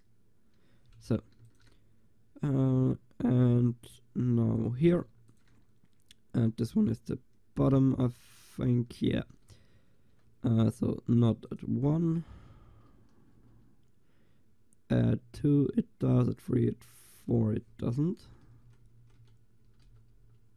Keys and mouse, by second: 1.4 ctrl+s, 4.8 click, 5.2 ctrl+s, 11.3-13.4 right drag, 13.4 Delete, 18.5 Right, 18.9 Right, 19.9 Delete.